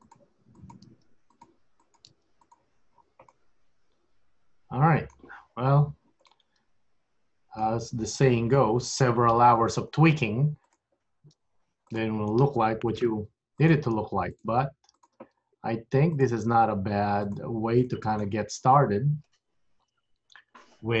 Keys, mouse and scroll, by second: 0.0 g, 0.6 click, 0.9 g, 1.9 click, 2.2 g, 2.9 scroll up 2, 3.0 scroll down 6, 3.5 middle click, 5.5-6.3 scroll up 3, 6.3 middle click, 9.0 KP_1, 10.0 scroll up 1, 10.8 click, 11.5 g, 13.0 click, 13.2 g, 14.5 click, 14.6 g, 15.6 scroll down 2, 16.2 click, 16.7 g, 18.0 middle click, 18.6-19.4 scroll down 3, 19.9-20.4 scroll up 3.